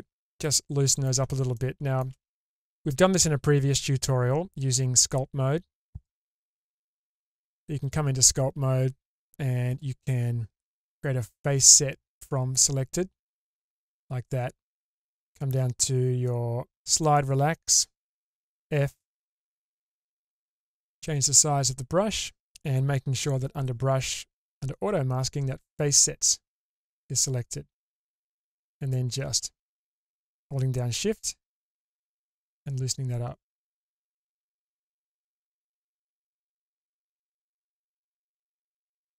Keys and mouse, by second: 6.2-7.9 drag, 9.7-13.1 drag, 16.9 click, 18.3 f, 27.9 click, 29.3 ctrl+z.